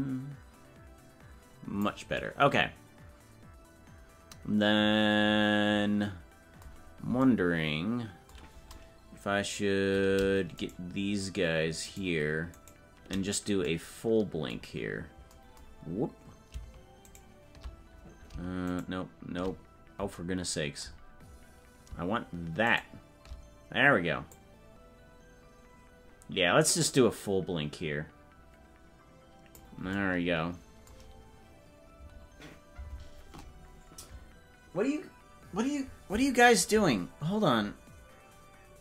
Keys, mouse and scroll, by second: 6.9 scroll down 2, 10.6-13.2 shift+right drag, 14.9 scroll up 3, 15.8 scroll down 1, 17.1 shift+right click, 21.1 scroll down 1, 21.8 scroll down 1, 22.6 shift+right click, 24.2-29.5 drag.